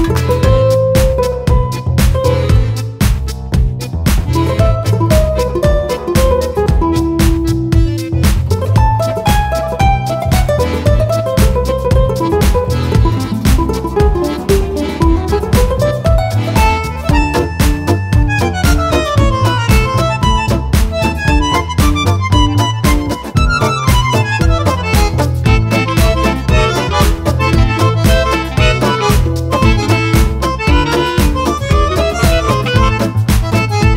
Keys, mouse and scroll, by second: 0.1 shift+click, 0.6 shift+click, 1.4 shift+click, 1.9 shift+click, 2.3 shift+click, 2.7 shift+click, 3.9 shift+click, 4.3 shift+click, 4.7 shift+click, 6.2 shift+click, 6.6 shift+click, 7.6 shift+click, 8.6 shift+click, 9.1 shift+click, 9.5 shift+click, 10.6 shift+click, 14.4-15.5 shift+drag, 15.7-17.4 shift+drag, 18.7 shift+click, 19.1 shift+click, 19.8 shift+click, 21.8 shift+click, 24.1-25.8 shift+drag, 25.9-28.3 shift+drag, 28.5-30.1 shift+drag, 31.5 shift+click, 33.5-33.9 shift+drag.